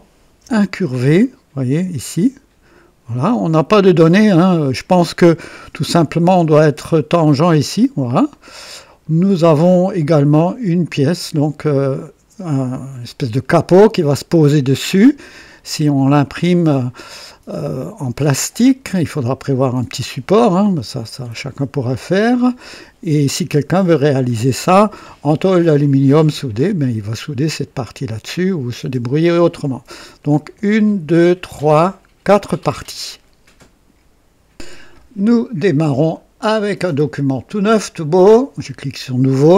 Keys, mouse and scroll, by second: 0.5 KP_2, 1.2-1.9 right drag, 3.2-4.2 drag, 4.4 click, 5.6 KP_2, 8.3 click, 9.5-11.0 drag, 15.8 scroll down 2, 16.3-16.9 right drag, 17.3-19.2 drag, 20.6-22.6 drag, 23.7 scroll up 1, 24.3-24.9 right drag, 38.1 click.